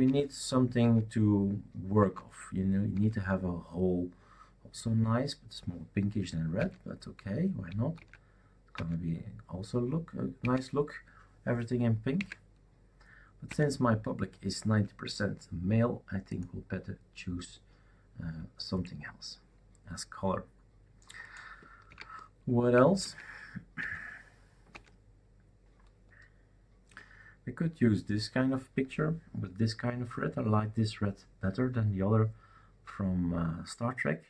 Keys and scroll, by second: 0.0 alt+Right, 0.8 alt+Right, 2.0 alt+Right, 2.9 alt+Right, 6.6 alt+Right, 7.9 alt+Right, 8.7 alt+Right, 10.4 alt+Right, 12.1 alt+Right, 13.5 alt+Right, 21.9 alt+Right, 23.0 alt+Right, 23.8 alt+Right, 24.7 alt+Right.